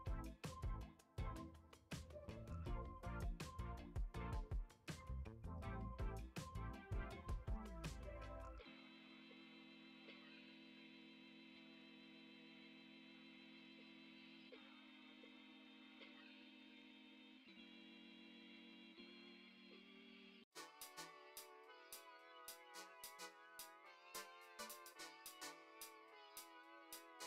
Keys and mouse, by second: 0.3 g, 1.6 s, 3.1 s, 5.4 s, 6.8 g, 10.1 KP_3, 11.0 g, 12.6 s, 13.7 r, 15.8 Tab, 16.6 middle click, 17.5 g, 20.1-21.5 drag, 22.4 click, 24.0 click, 24.9 middle drag, 25.3 Tab, 26.5 click, 26.8 alt+z, 27.2 click.